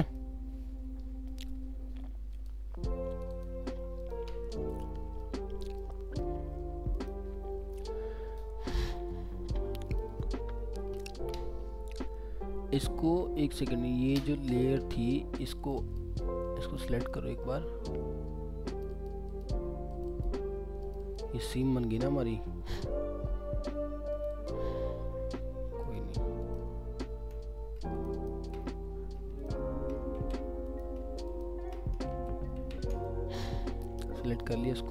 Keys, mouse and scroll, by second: 0.1 alt+middle click, 3.3 click, 4.5-4.8 scroll down 1, 5.2 alt+middle click, 6.2 scroll up 1, 8.2 scroll down 1, 8.6 alt+scroll up 1, 8.7 alt+middle click, 9.2 scroll up 1, 10.1 double click, 14.5 scroll up 1, 15.8 double click, 17.1 alt+middle click, 17.8 alt+scroll up 2, 18.9 double click, 24.3 double click, 27.3 ctrl+scroll down 2, 27.9 shift+click, 28.1 shift+double click, 28.6 scroll down 1, 29.4 shift+click, 30.2 ctrl+z, 31.3 shift+click, 32.0 shift+click, 32.1 ctrl+z, 32.6 ctrl+z, 33.0 alt+middle click, 33.6 scroll up 1, 34.0 alt+middle click, 34.8 scroll up 1.